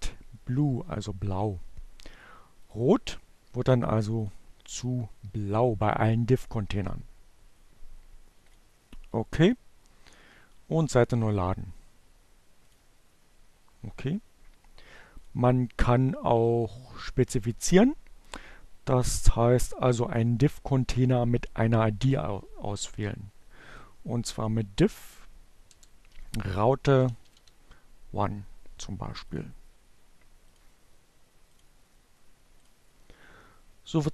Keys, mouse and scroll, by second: 2.0 click, 3.6 click, 7.4 click, 9.0 click, 10.4 click, 12.4 click, 24.8-26.9 typing, 27.8 click, 28.9 click, 30.0-31.7 drag.